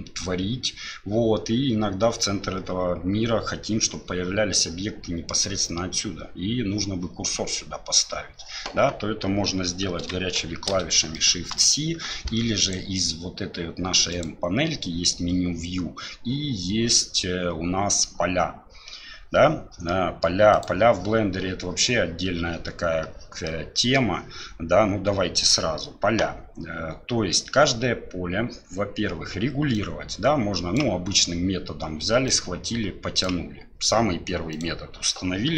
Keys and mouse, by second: 10.5 shift+c, 11.1-11.5 shift+middle drag, 12.6 click, 14.1 click, 19.9 middle click, 20.5 click, 23.4 middle click, 29.7-30.8 drag, 32.4 click, 34.6-35.5 drag.